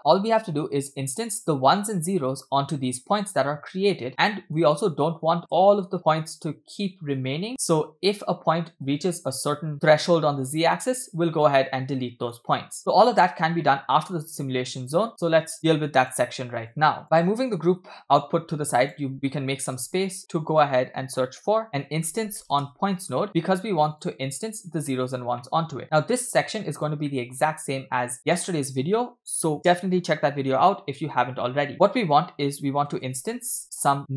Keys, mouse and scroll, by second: 0.0 space, 0.3-0.9 scroll up 4, 3.5-3.8 scroll down 2, 4.3 scroll down 2, 4.3 shift+middle click, 5.6 space, 8.8 space, 13.6-14.0 middle drag, 15.2-16.2 drag, 16.7-19.0 drag, 19.1 middle click, 19.4-19.8 scroll up 1, 19.8 shift+a, 24.8 click, 25.5 middle click, 25.8 scroll down 2, 26.0 middle click, 26.6 click, 27.1 middle click, 27.6 shift+a.